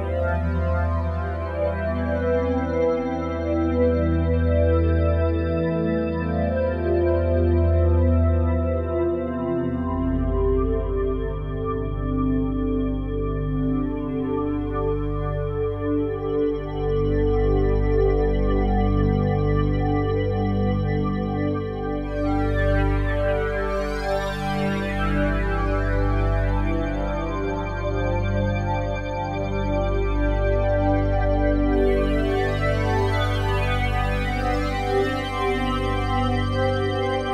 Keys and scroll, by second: 8.8 ctrl+z, 13.1 ctrl+z.